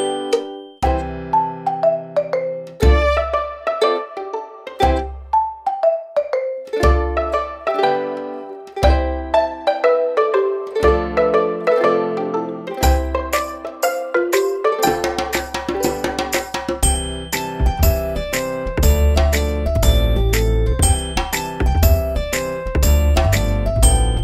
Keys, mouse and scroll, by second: 4.4 ctrl+click, 18.0 Up, 22.6-22.9 scroll up 1, 23.0 space, 23.1 click, 23.5 space, 23.9-24.2 alt+scroll up 2.